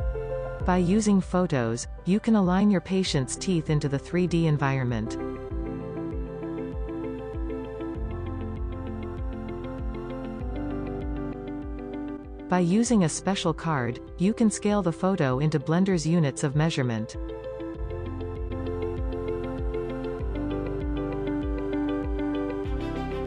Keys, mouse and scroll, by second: 3.5-3.8 scroll up 1, 3.8-5.9 drag, 5.9 shift+middle click, 6.5 click, 8.9 click, 11.3 click, 11.6 r, 14.7 scroll up 3, 16.0 s, 16.8 g, 17.2 s, 17.5 r, 17.7 scroll down 2, 19.0 click, 19.5-20.1 scroll up 7, 19.9 click, 20.7 click, 21.9 scroll down 2.